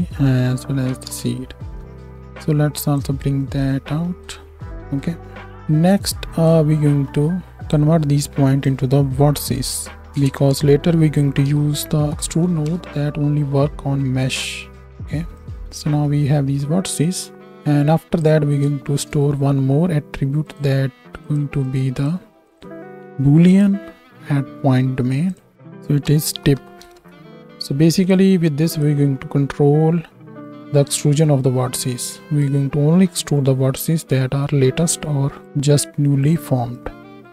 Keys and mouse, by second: 14.3-14.8 right drag, 14.8-18.7 drag, 18.8 shift+a, 21.3 click, 25.4 click.